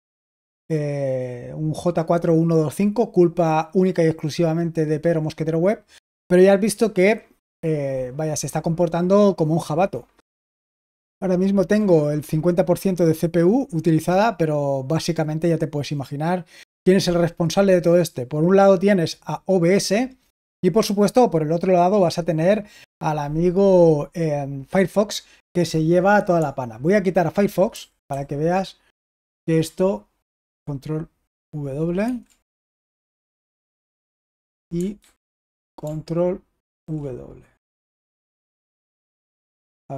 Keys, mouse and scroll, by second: 27.6 super+h, 28.0 super+h, 28.9 super+h, 32.0 ctrl+w, 34.9 super+h, 36.7 ctrl+w, 38.7 ctrl+w.